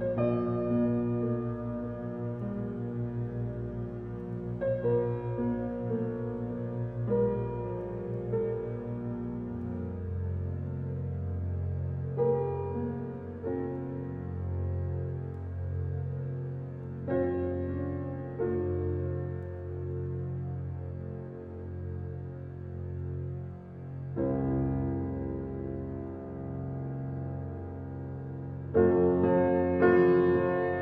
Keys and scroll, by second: 14.9 space, 18.4 a, 25.6 a, 28.9 space.